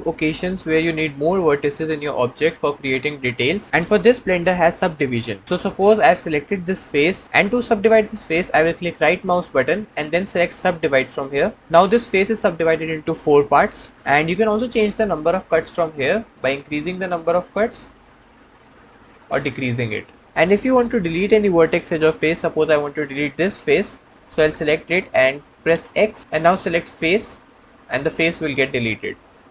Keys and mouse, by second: 0.2-2.4 middle drag, 2.4-3.7 middle drag, 9.5 click, 15.1 click, 16.3-20.2 drag, 22.9 click, 25.9 x, 28.0-29.5 middle drag.